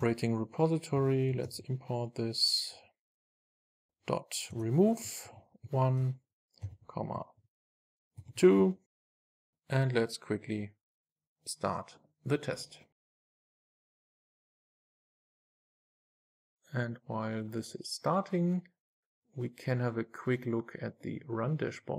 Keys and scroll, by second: 0.1 Return, 1.5 alt+Return, 4.5 Return, 9.0 super+s.